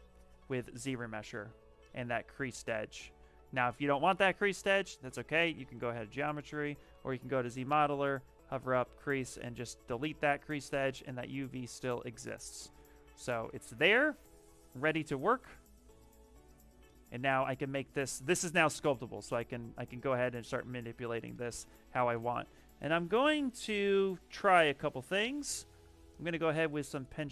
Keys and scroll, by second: 1.0 shift+f, 1.5 shift+f, 7.7 space, 17.7 s, 19.3 s, 20.3 s, 22.0 b.